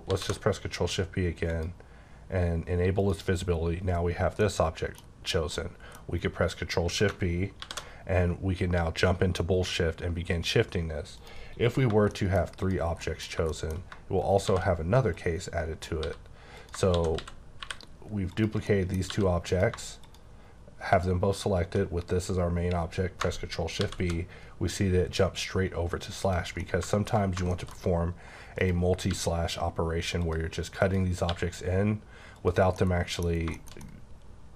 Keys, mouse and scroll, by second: 0.1 shift+b, 1.5 click, 3.0 click, 3.6-4.4 scroll up 1, 4.4 middle click, 5.5 middle click, 7.6 shift+b, 10.0-11.1 scroll down 1, 11.5 scroll down 3, 12.1 shift+middle click, 12.6 click, 13.0 middle click, 14.2 shift+right click, 14.4 shift+a, 15.1 click, 16.0-17.6 typing, 16.6 click, 18.3 click, 18.6 middle click, 19.1 g, 19.5 click, 21.3 shift+click, 23.8 shift+b, 26.2 click, 26.6 middle click, 27.8 scroll up 2, 28.6 click, 29.1 g, 30.2 click, 30.8 click, 31.3 g, 32.4 click, 32.8 middle click, 33.3 scroll down 1, 33.5 shift+middle click.